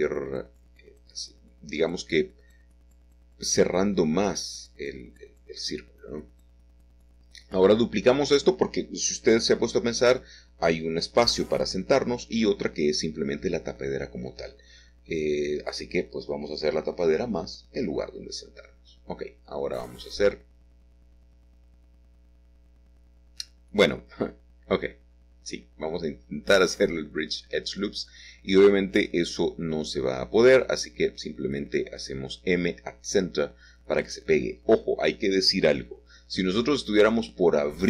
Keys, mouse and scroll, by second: 0.0 click, 1.8 l, 3.9 Escape, 5.1 g, 7.6-8.7 drag, 9.5 1, 10.9 a, 12.2 typing, 13.6-14.7 alt+shift+drag, 15.0-17.1 typing, 15.9 click, 16.8 click, 20.0 Escape, 20.5 ctrl+z, 22.7 F3, 23.4-23.8 typing, 25.2 Return, 29.7 m, 31.8 click, 32.4-34.2 middle drag, 34.2-36.6 scroll down 2, 36.6-37.1 scroll up 2, 37.1-37.8 middle drag.